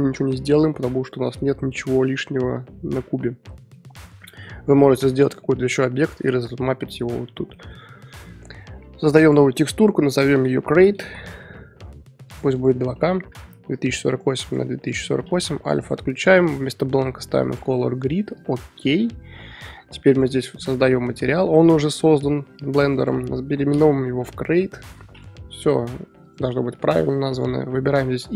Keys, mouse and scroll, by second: 0.6-7.8 middle drag, 7.8 Tab, 12.2-15.6 drag, 22.2 click, 22.8 click, 25.4-28.3 drag.